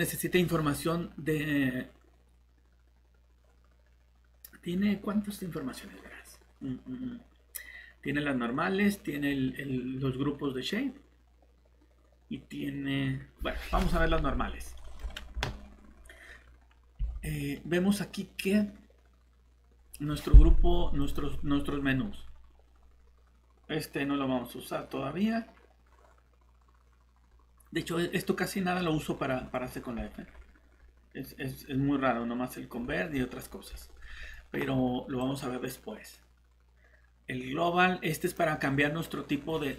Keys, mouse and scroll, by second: 17.0 shift+Tab, 21.0 click, 28.9 scroll down 1, 32.8 scroll up 1, 35.2 click.